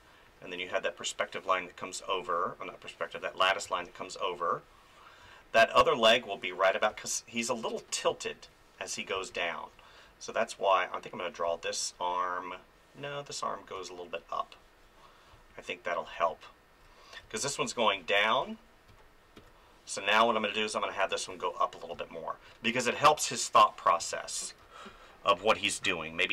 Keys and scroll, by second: 2.0 ctrl+z, 3.6 space, 5.2 space, 6.9 space, 11.4 space, 13.8 space, 17.2 space, 18.4 ctrl+z, 21.3 ctrl+z, 21.9 space, 24.0 ctrl+z, 24.6 space.